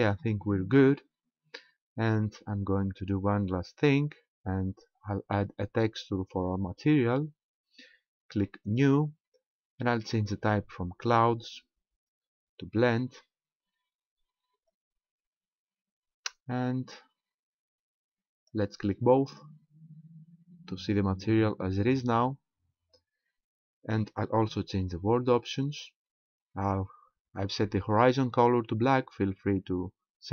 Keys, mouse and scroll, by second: 3.8 click, 8.6 click, 11.0 click, 14.7 click, 19.3 click, 25.6 click.